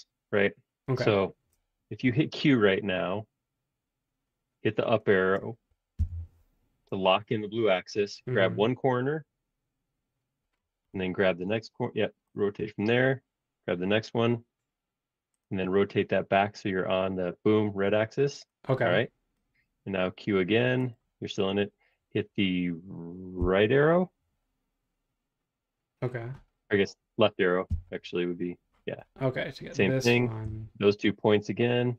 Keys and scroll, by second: 2.2 q, 6.0 Caps_Lock, 23.3 Right, 27.6 Left.